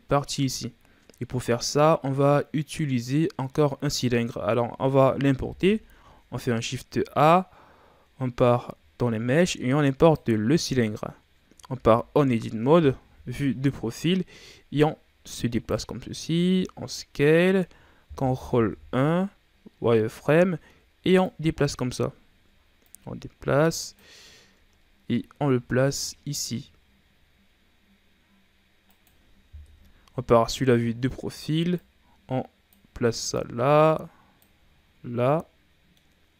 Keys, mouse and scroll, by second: 3.1-3.5 scroll down 3, 3.5-5.4 middle drag, 5.4 KP_1, 6.2 shift+a, 10.9-11.6 scroll down 5, 11.6 Tab, 12.2-13.0 scroll down 2, 13.0 KP_3, 14.7-16.2 drag, 16.2 s, 18.5 ctrl+KP_1, 19.7 z, 20.2-21.2 scroll up 3, 21.2 click, 22.1 ctrl+scroll down 5, 22.8-24.3 drag, 24.3-24.7 scroll down 4, 24.7-25.4 scroll up 4, 25.4 s, 29.6 KP_3, 30.0 z, 30.7-31.8 shift+scroll down 4, 31.8-34.7 drag, 34.7-35.3 ctrl+scroll down 4, 35.3-36.3 middle drag.